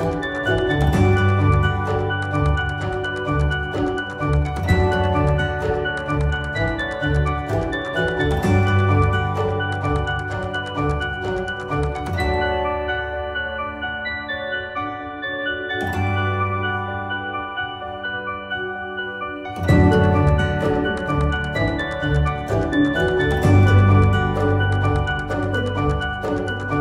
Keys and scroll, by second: 5.2 ctrl+r, 9.4 ctrl+r, 11.2 ctrl+z.